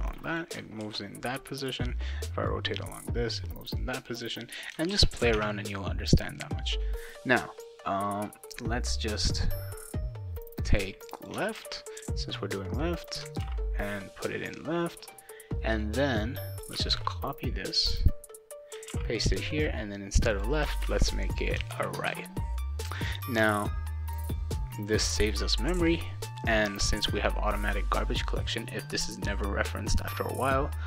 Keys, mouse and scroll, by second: 0.8 ctrl+z, 1.6 click, 2.4 click, 4.2 click, 4.9 ctrl+s, 5.3 alt+Tab, 11.0 click, 11.2 click, 11.6 ctrl+c, 13.1 click, 13.4 ctrl+v, 15.8 click, 16.9 ctrl+c, 17.7-18.7 drag, 18.9 ctrl+v, 20.3 click, 20.8 ctrl+c, 21.3 click, 21.7 ctrl+v, 22.1 ctrl+s.